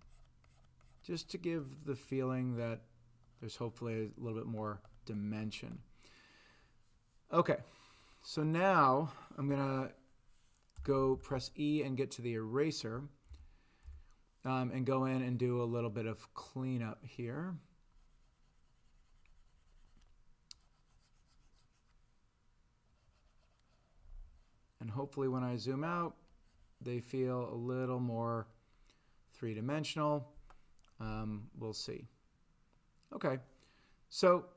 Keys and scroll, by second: 9.5 e, 10.8 ,, 11.0 ,, 11.1 ,, 11.3 ,, 13.3 ., 13.9 ,.